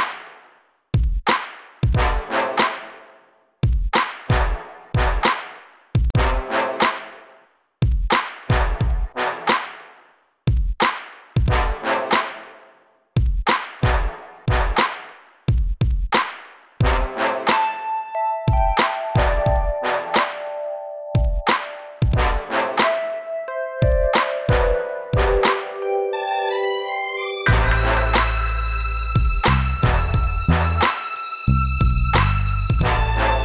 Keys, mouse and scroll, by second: 6.9 scroll down 2, 11.2 b, 12.8 click, 12.9 click, 13.0 click, 13.1 click, 13.7 click, 13.8 click, 14.7 middle click, 16.9 scroll up 2, 17.4 click, 17.5 click, 18.2-19.1 scroll down 1, 22.1 shift+Return, 23.0 click, 24.6 click, 25.8 click, 26.8 click, 27.0 click, 28.5 click, 30.2 click.